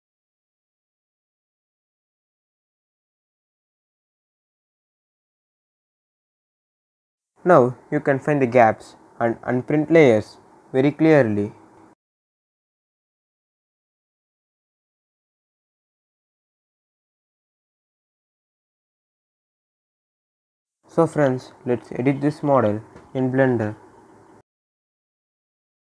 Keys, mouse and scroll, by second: 8.5 scroll up 1, 8.8-11.9 right drag, 12.0 click, 12.1-19.0 right drag, 19.0 scroll down 1, 19.9-22.0 right drag, 22.0 click, 23.9-24.3 scroll up 1, 25.0 click, 25.5 scroll down 1.